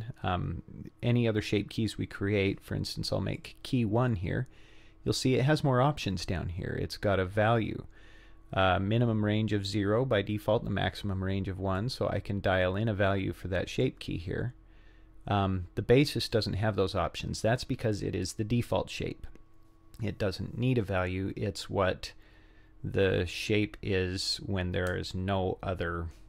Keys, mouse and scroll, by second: 3.4 click, 11.8-13.9 drag, 16.3 click.